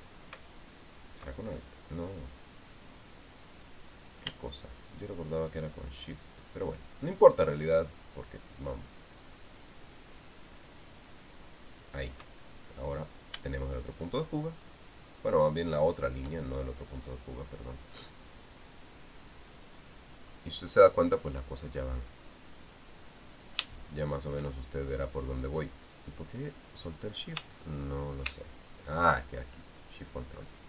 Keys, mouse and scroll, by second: 0.8 alt+click, 4.8 shift+click, 12.5 shift+click, 13.8 shift+click, 16.6 shift+click, 24.1 click, 28.0 shift+click.